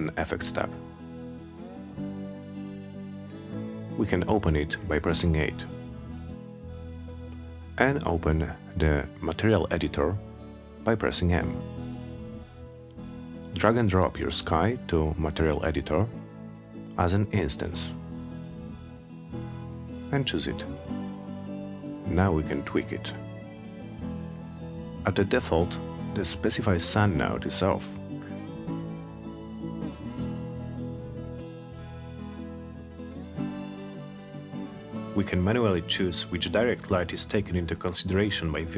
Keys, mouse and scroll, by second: 0.8 8, 2.4-3.7 drag, 7.5 m, 10.2-11.3 drag, 12.3-13.6 drag, 15.1 click, 17.0 click, 17.4 click, 19.9 click, 20.2 click, 21.4-23.3 drag, 34.3 click, 37.9 click.